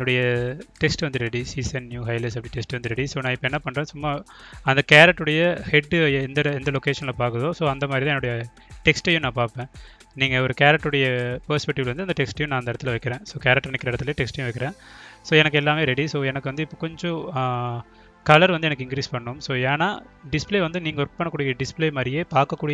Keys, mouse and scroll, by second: 1.8 click, 2.2 click, 3.2 click, 4.2-5.9 drag, 6.2-8.1 drag, 10.2-11.7 drag, 11.9 click, 14.0 click, 14.7 ctrl+click, 16.0 click, 16.3-20.1 drag, 21.0-22.3 drag, 22.6-22.7 drag.